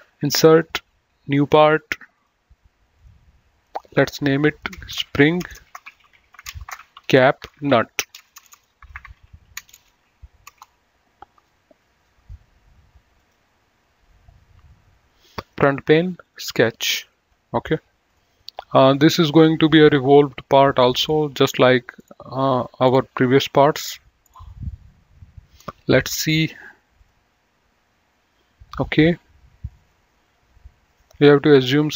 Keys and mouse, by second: 0.7 click, 4.6 F2, 4.9-10.3 typing, 10.7 Return, 12.3 right click, 13.2 click, 15.6 click, 27.2 click.